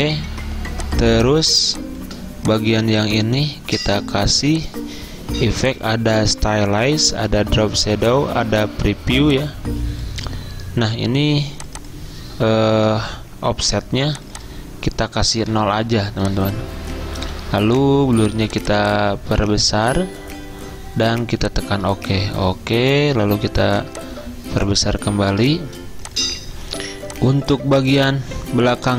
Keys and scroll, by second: 13.0 0, 15.6 0.